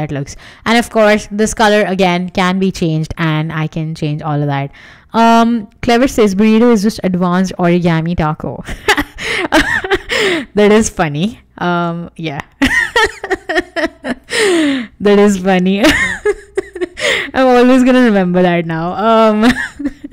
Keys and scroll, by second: 16.0 super+x, 17.4 BackSpace, 18.6 alt+shift+v.